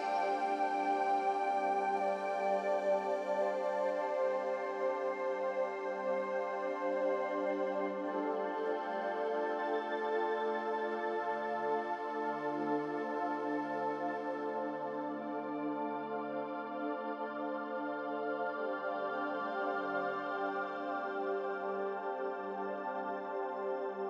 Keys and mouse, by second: 0.1-4.2 drag, 7.7-8.3 middle drag, 10.3 s, 12.1 ctrl+z, 12.7 s, 16.3-17.3 drag, 17.6 g, 18.4 g.